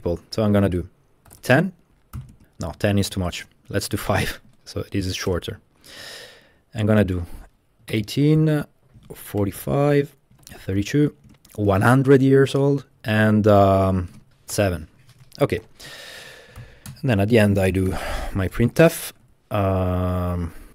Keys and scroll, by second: 1.1-5.7 typing, 2.8 Left, 3.1 Left, 7.6-14.6 typing, 15.4 Tab, 15.6-18.9 typing, 16.2 Right, 16.9 Return, 18.5 Return, 19.3 Left, 20.5-20.7 typing.